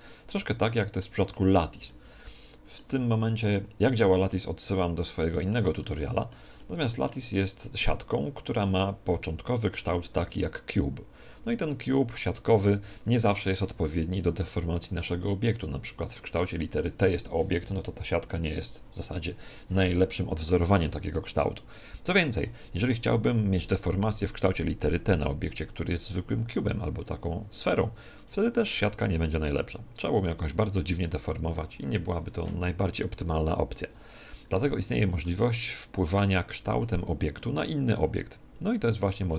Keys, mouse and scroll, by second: 4.3-8.5 middle drag, 35.2-37.1 middle drag.